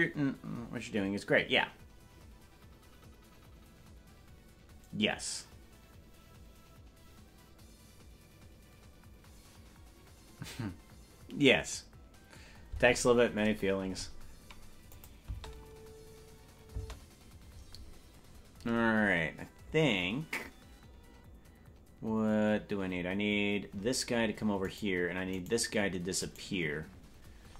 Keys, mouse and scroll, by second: 15.0 click, 15.6 space, 16.8 space, 24.8 right click.